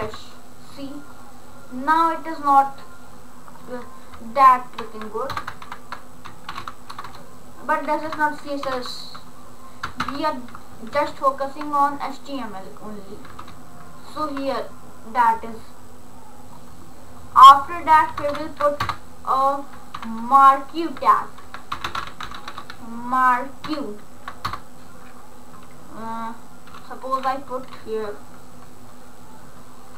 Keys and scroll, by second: 5.7-7.1 typing, 8.2-10.1 typing, 11.0 ctrl+s, 18.9 shift+Return, 20.0 shift+,, 21.5-23.8 typing, 24.6 Return.